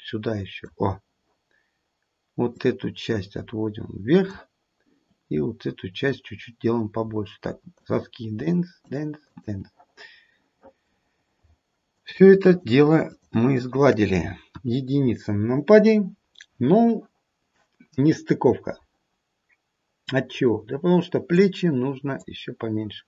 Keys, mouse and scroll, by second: 2.6 click, 5.0 click, 6.7-7.4 scroll up 2, 7.7 shift+click, 8.4 shift+click, 8.8 shift+click, 9.2 shift+click, 10.1-11.4 scroll down 1, 11.9 shift+click, 13.0 shift+click, 14.4 KP_1, 14.9-15.5 scroll down 1, 15.5-16.1 scroll down 3, 16.1-16.7 scroll down 1, 18.4 scroll up 1, 20.1 click, 22.2 click.